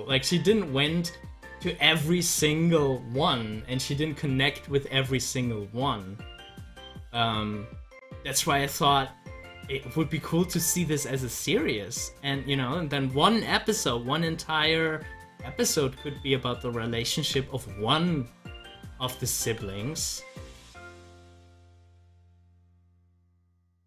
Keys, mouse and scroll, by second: 5.7 click, 6.8 ctrl+z, 8.5 ctrl+z, 10.4 z, 11.2-15.1 drag, 15.1 ctrl+z, 17.1 ctrl+z, 19.4 ctrl+z.